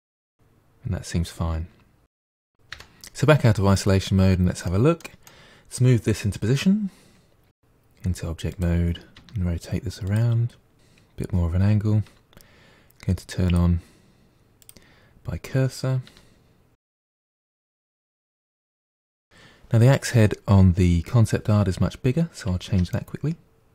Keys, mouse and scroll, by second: 0.4 click, 0.5 g, 1.0 middle click, 1.3 Tab, 1.5-2.5 middle drag, 2.5 click, 2.7 KP_Divide, 3.9-4.7 scroll down 4, 4.7-7.5 middle drag, 7.5 Tab, 7.9 g, 9.2 r, 10.1 g, 13.5-16.1 drag, 16.1 r, 17.2 g, 17.6 r, 18.1-18.9 middle drag, 19.3-20.2 middle drag, 22.7 Tab, 22.9-23.7 middle drag.